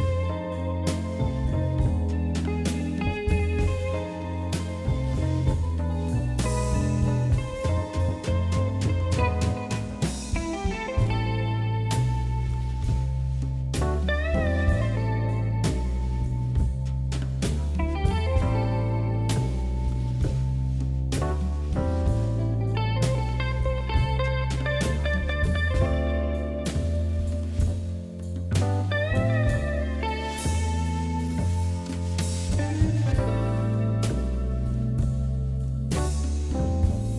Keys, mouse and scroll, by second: 0.1 scroll down 4, 0.4 shift+middle click, 0.7 shift+z, 1.5 click, 2.6 s, 3.8 KP_3, 4.4 shift+z, 4.5 scroll up 4, 5.9 click, 6.9 g, 7.9 click, 8.6 g, 9.0 click, 9.6 g, 10.5 s, 11.8 scroll down 2, 12.0 middle click, 12.6-13.2 scroll up 1, 13.2 click, 13.7 shift+click, 14.1 KP_3, 14.8 g, 16.0 middle click, 16.7 scroll down 1, 17.2 KP_1, 18.1 shift+z, 18.5 click, 19.6 shift+click, 20.2 shift+click, 21.5 s, 22.3 KP_1, 23.6 KP_3, 24.3 shift+z, 24.5 scroll down 3, 24.7 middle click, 25.6 s, 26.8 KP_1, 27.6 g, 28.8 s, 31.0 ctrl+z, 31.5 ctrl+z, 32.0-32.8 scroll up 2, 32.8 ctrl+KP_Add, 33.0 ctrl+KP_Add, 34.0 s, 34.8 ctrl+KP_Add, 35.4 s, 36.5 g.